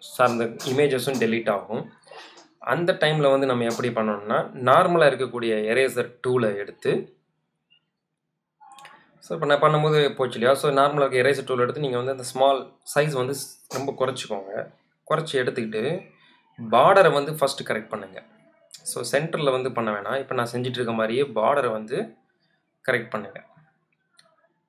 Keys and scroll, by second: 6.2 super+z, 7.5 space.